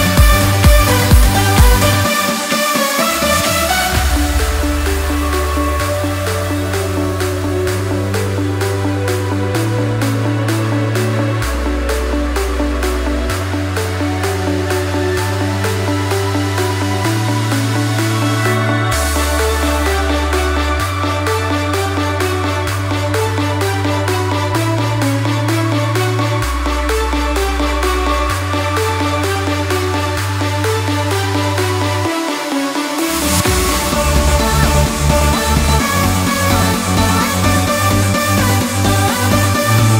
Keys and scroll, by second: 6.6 ctrl+t, 10.7 ctrl+t, 15.0 ctrl+t, 17.8 ctrl+t, 20.3 ctrl+t, 25.6 ctrl+t, 31.2 ctrl+g, 31.4 ctrl+j, 31.5 ctrl+e, 32.4 ctrl+t, 32.9 ctrl+z, 33.1 ctrl+t, 34.6 ctrl+j.